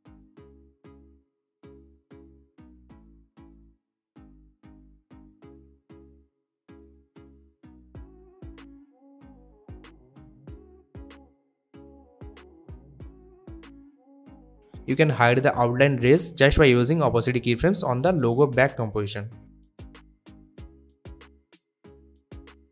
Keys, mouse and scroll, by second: 3.8 click, 6.4 click, 9.8-10.3 click, 11.0-13.7 drag, 14.6 t, 15.4-18.3 drag, 20.0 space.